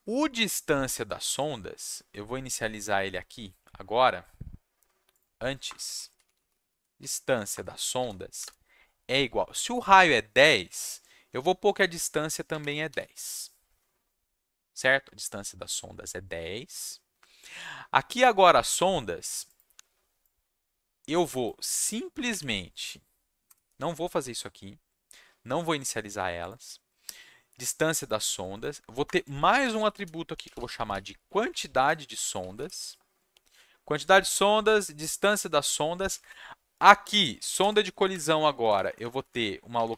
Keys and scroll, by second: 5.6 Return, 5.7-8.4 typing, 7.5 Return, 12.2-13.4 typing, 23.4 BackSpace, 29.0 Return, 29.2 Tab, 29.3-32.9 typing, 35.9 Down, 36.0 Down, 36.2 Down, 36.2 Left, 37.3 Left, 37.6 Right, 38.1 shift+8, 38.6 Right, 38.7 Right, 38.8 Right, 39.0 Right, 39.1 Right, 39.3 Right.